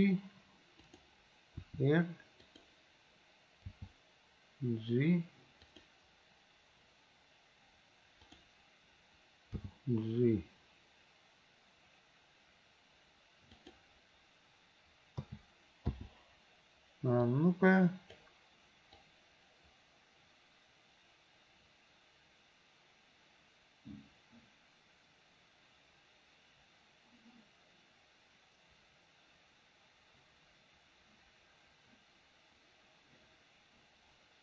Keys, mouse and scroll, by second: 1.6 r, 3.7 g, 8.3 click, 9.6 g, 15.3 a, 15.9 i, 17.3-18.2 drag, 19.0-34.4 drag.